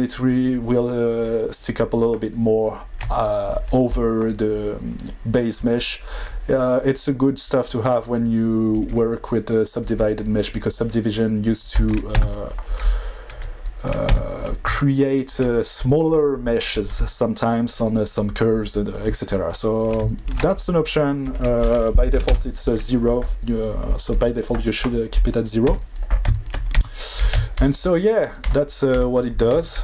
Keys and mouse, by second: 8.7 click, 8.8 click, 9.8 click, 9.9 click, 12.1 Tab, 13.3 middle click, 14.1 Tab, 21.2-22.3 drag, 25.7 Tab, 26.7 2, 27.8 shift+click, 29.5 ctrl+e.